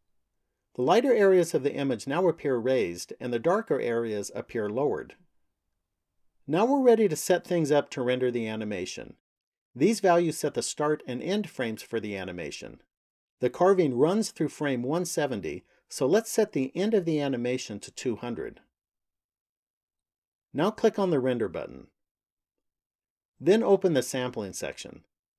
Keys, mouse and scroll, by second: 16.3 click, 17.9 KP_0, 21.8 click, 23.6 click.